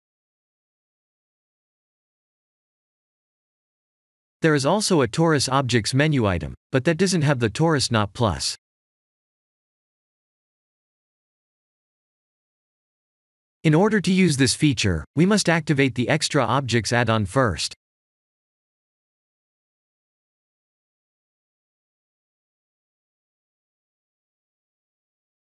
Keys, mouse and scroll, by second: 0.4 shift+a, 19.0 click.